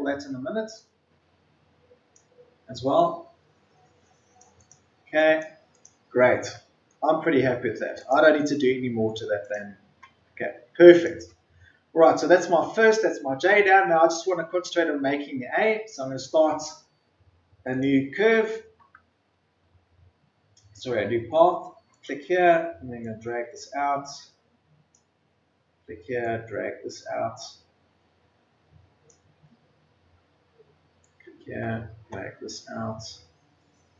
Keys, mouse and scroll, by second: 6.2-6.8 ctrl+scroll down 1, 7.0-7.9 scroll up 1, 7.9 click, 8.8 ctrl+scroll up 1, 9.4 click, 9.8-10.3 ctrl+scroll down 1, 10.8 click, 19.5-20.4 ctrl+scroll up 1, 21.9-33.9 drag.